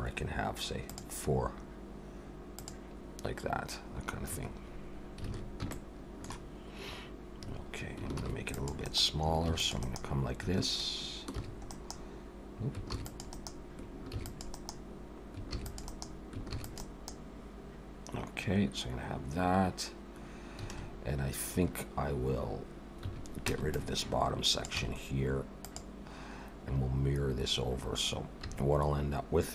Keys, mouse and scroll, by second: 5.0 scroll up 2, 5.3 alt+a, 5.7 shift+middle click, 8.1 ctrl+r, 9.5 ctrl+r, 11.4 ctrl+r, 12.9 ctrl+r, 14.1 ctrl+r, 15.5 ctrl+r, 16.4 ctrl+r, 20.7 alt+a, 23.0 1, 23.5 b, 24.8 x, 28.4 3.